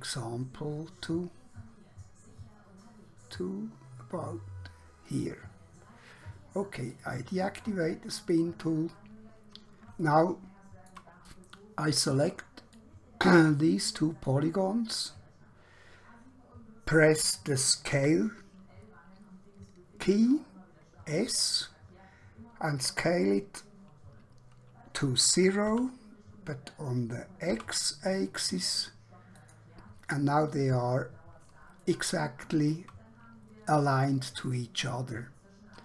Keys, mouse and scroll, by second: 9.3 scroll up 1, 10.3 shift+middle click, 11.3 scroll up 1, 12.8 click, 17.9 s, 25.6 0, 27.5 typing, 29.5 click, 30.5 scroll up 1, 30.9 scroll down 1, 32.1 shift+middle click, 35.5 scroll down 1.